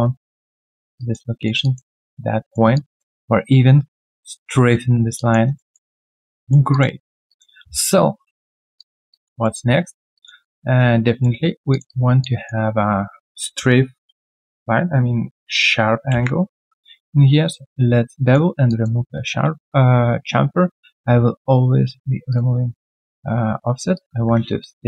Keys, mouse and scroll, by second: 0.6 alt+right click, 0.9 alt+click, 1.3 alt+right click, 1.6 alt+click, 2.4 alt+right click, 2.7 alt+click, 5.4 alt+right click, 5.7 alt+middle click, 6.0 alt+click, 6.4 alt+middle click, 6.7 alt+click, 7.0 alt+right click, 7.2 alt+click, 7.8 right click, 7.8 q, 8.5 scroll down 1, 8.7 alt+click, 9.1 alt+double click, 9.4 alt+middle click, 9.7 alt+right click, 10.1 alt+click, 10.4 alt+middle click, 10.8 right click, 12.2 alt+click, 18.6 alt+click.